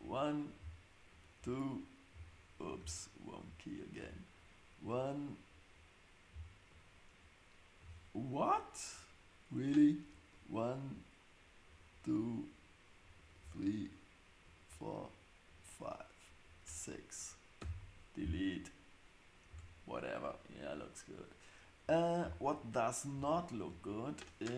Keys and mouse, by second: 1.2 super+click, 2.2 click, 6.7 super+click, 9.0 click, 9.8 click, 14.5 shift+click, 15.4 shift+click, 16.4 shift+click, 17.6 x, 19.5 Tab.